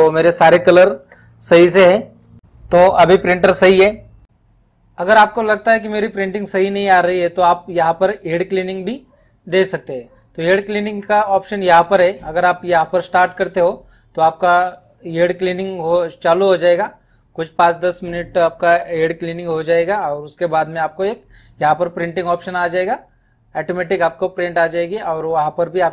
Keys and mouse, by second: 3.8 click.